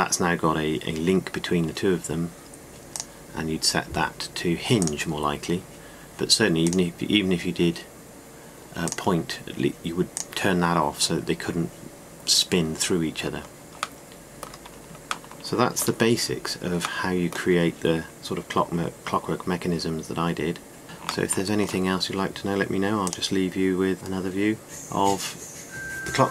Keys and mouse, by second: 14.3-14.9 middle drag.